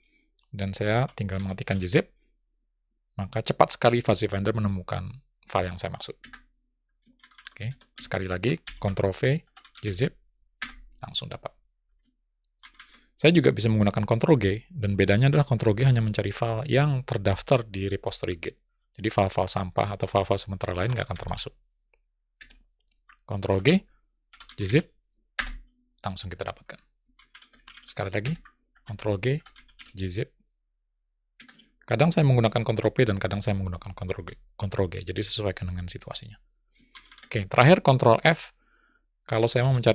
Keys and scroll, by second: 22.8 ctrl+g.